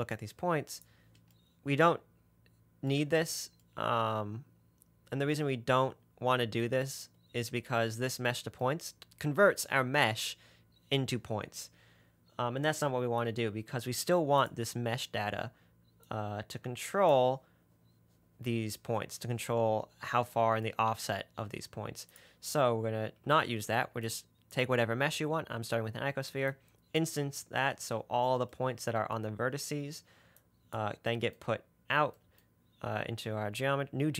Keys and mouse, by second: 0.1-1.3 drag, 14.7 click, 16.3-17.5 drag, 23.5 ctrl+x, 28.8-29.8 middle drag, 29.9 middle click, 31.1-34.1 middle drag.